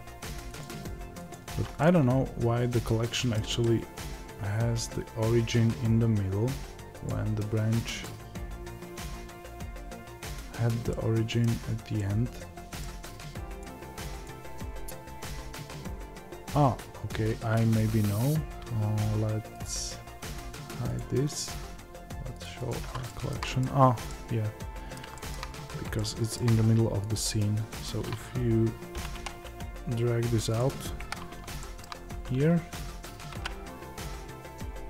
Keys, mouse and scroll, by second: 1.7-8.0 middle drag, 8.0 click, 10.8-13.6 middle drag, 13.6 click, 14.8-20.8 scroll down 2, 20.8-23.0 drag, 23.0-27.1 shift+middle drag, 24.9 scroll down 2, 25.4-25.9 scroll up 2, 27.1 click, 30.9 KP_7, 31.5-34.8 shift+middle drag, 31.9-33.3 scroll up 1, 33.3 g.